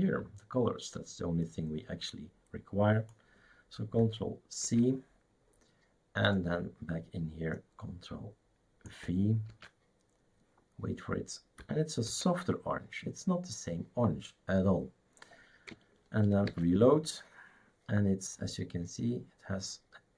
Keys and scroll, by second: 4.6 ctrl+c, 9.5 ctrl+v, 12.1 ctrl+s, 16.5 shift+super+r.